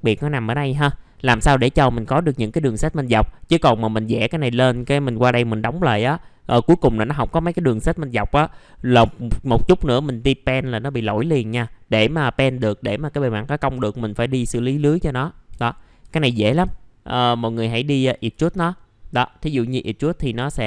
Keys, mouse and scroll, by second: 0.7 1, 1.0 scroll down 1, 1.2 middle click, 16.5 typing, 18.1-20.6 drag.